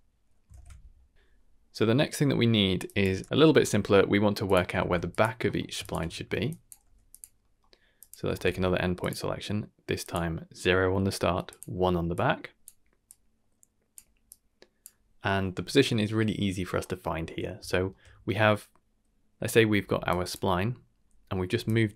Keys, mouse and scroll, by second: 0.5 ctrl+s, 1.2 shift+Left, 1.2 shift+space, 1.8 middle click, 2.2 middle click, 2.6 middle click, 2.8 click, 3.2 g, 3.7 click, 3.7 scroll up 3, 3.8 middle click, 4.4 click, 4.7 shift+d, 5.4 middle click, 5.8 ctrl+shift+click, 6.3 middle click, 6.4 drag, 6.8 g, 7.4 middle click, 7.9 click, 8.3 shift+d, 10.0 click, 11.4 click, 12.1-12.6 drag, 13.0-13.9 drag, 14.3 click, 15.1 middle click, 16.8 middle click, 17.2 middle click, 17.8 shift+middle click, 19.8 d, 20.0 drag, 20.3 d, 20.8 d, 21.6 click.